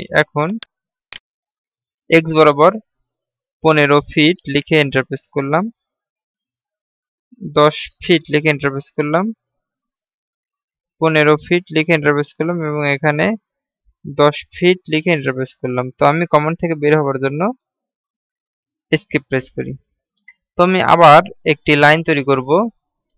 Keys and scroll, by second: 19.7 Escape.